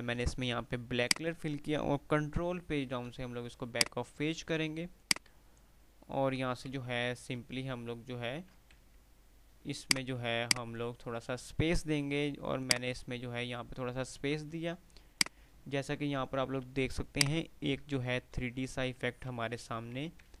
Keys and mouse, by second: 1.0 click, 2.1 ctrl+Page_Down, 4.0-5.7 drag, 6.9 ctrl+r, 9.3 F3, 10.1 click, 10.4 F2, 10.6 click, 10.9 F2, 11.4 F2, 12.7 F2, 12.7 click, 14.6 2, 15.3-18.4 drag, 19.2-20.4 typing.